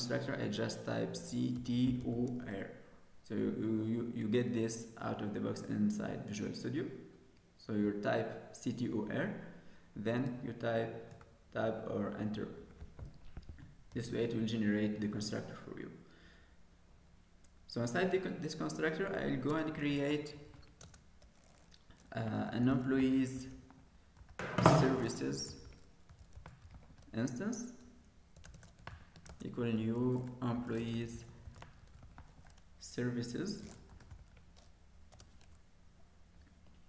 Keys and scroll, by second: 11.1 Tab, 13.9 ctrl+s.